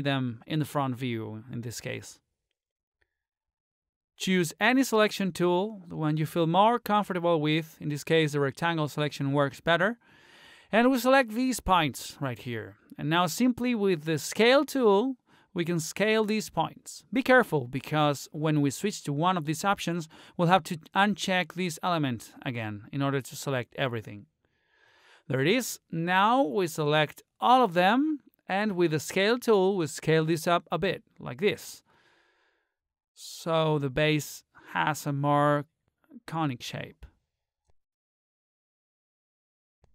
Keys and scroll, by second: 14.3 ctrl+z.